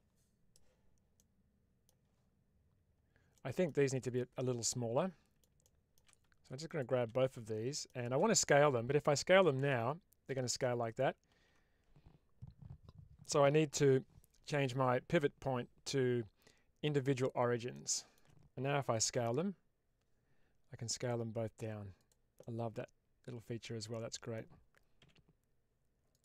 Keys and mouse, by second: 1.1-1.7 middle drag, 3.2-3.6 middle drag, 3.9 click, 4.6-5.4 middle drag, 5.5-5.9 shift+middle drag, 6.6 shift+click, 7.3 shift+middle click, 9.7 s, 10.8 click, 11.3 ctrl+z, 17.6-18.1 shift+middle drag, 19.0 s, 21.9 click, 22.3-24.2 middle drag, 25.3 s, 26.0 click.